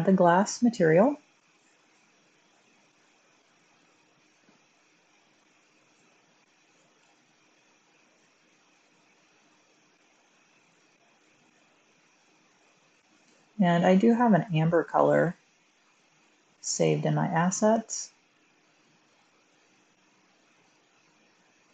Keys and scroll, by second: 7.0 1.